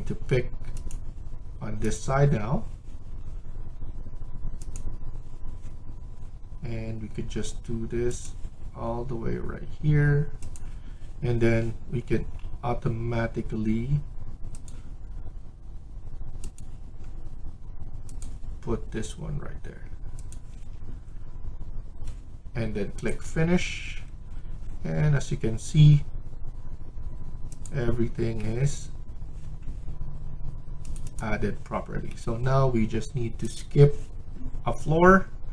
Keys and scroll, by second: 16.7 Escape, 20.4 Escape, 24.7 Escape.